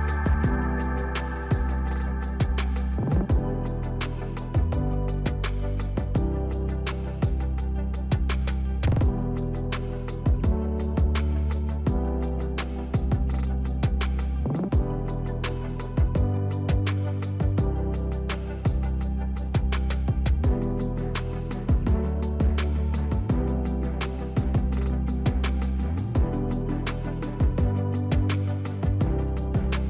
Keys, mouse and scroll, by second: 6.0 click, 12.7 click, 14.7 Delete, 17.7 click, 22.6-29.8 drag.